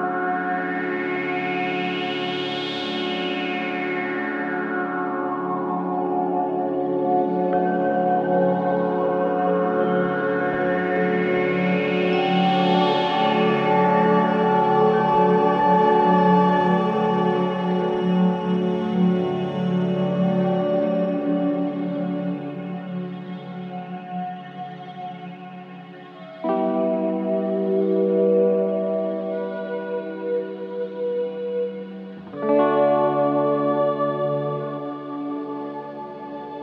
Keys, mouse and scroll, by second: 1.9-3.7 drag, 3.5-4.2 typing, 5.3 click, 7.9 scroll up 1, 8.9 click, 11.0-11.9 typing, 13.1-14.6 typing, 16.3 space, 17.4 click, 18.3 right click, 19.2 click, 20.6-21.2 scroll down 1, 21.2-23.1 scroll down 1, 23.1 scroll up 1, 23.6 click, 28.4 click, 32.9 ctrl+z, 33.8 click, 34.3-34.6 scroll up 1, 36.4 scroll down 1.